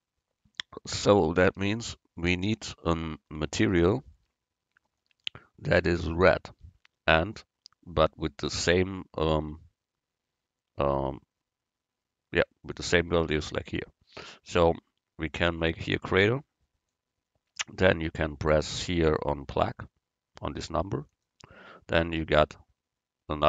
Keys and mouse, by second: 1.3-3.0 middle drag, 15.7-23.1 drag.